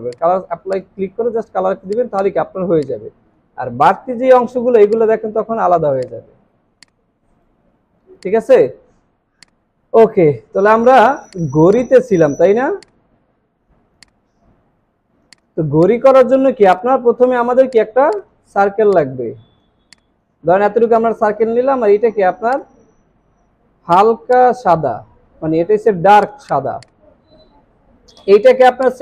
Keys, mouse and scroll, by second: 2.1 double click, 11.0 alt+scroll down 1, 11.2 space, 14.8 alt+scroll up 1, 15.6 alt+scroll down 3, 16.3 alt+scroll up 1, 19.8 alt+shift+click, 24.4 double click.